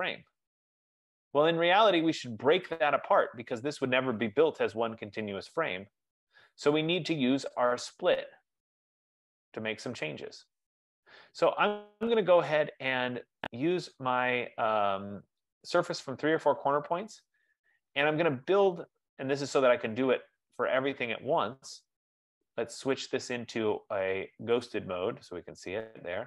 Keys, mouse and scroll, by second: 13.8 click, 16.7 click, 18.0-18.3 scroll, 18.5-19.1 scroll, 23.3 click, 24.7 click.